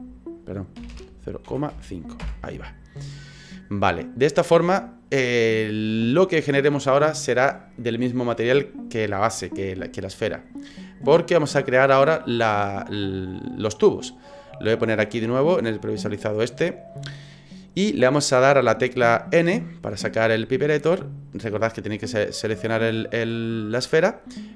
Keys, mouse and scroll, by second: 0.9 BackSpace, 11.1 middle click, 13.3 middle click, 15.3 click, 16.1 middle click, 19.9 n.